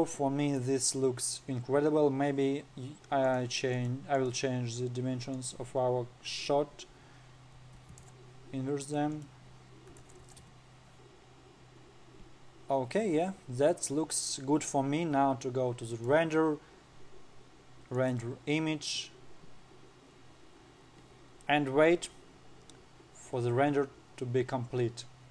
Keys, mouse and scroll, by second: 0.0 scroll up 3, 0.7 scroll down 1, 3.8 click, 4.3 click, 4.7 click, 5.9-9.0 drag, 9.0-9.6 scroll down 1, 9.7-11.7 drag, 11.7-12.3 scroll up 4, 12.3 scroll down 2, 15.8-16.4 scroll down 1, 16.4-19.0 drag, 17.3-18.9 scroll down 3.